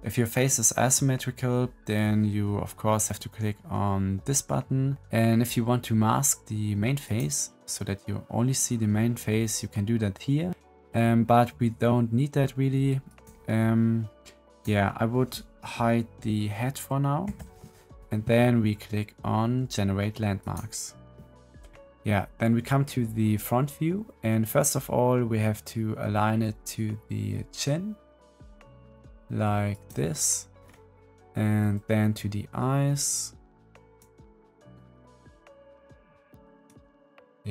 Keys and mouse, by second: 6.9 click, 13.1 click, 14.5 click, 17.2 h, 20.3-30.6 drag, 31.0-36.7 middle drag.